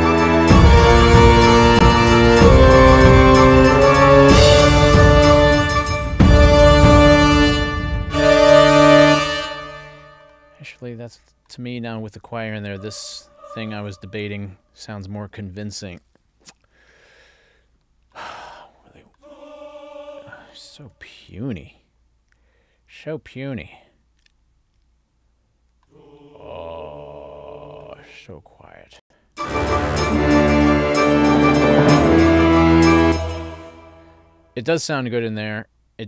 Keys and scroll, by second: 9.1 space, 29.0 space, 33.0 space.